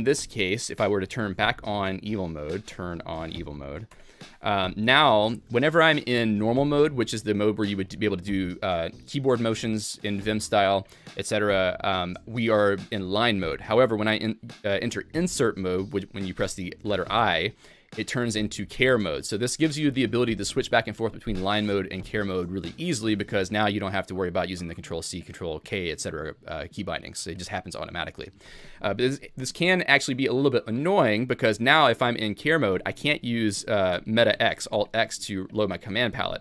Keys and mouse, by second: 1.3 alt+x, 4.0 Return, 5.0 Escape, 17.2 i, 33.1 alt+x, 33.9 alt+x, 34.3 alt+x, 34.7 alt+x.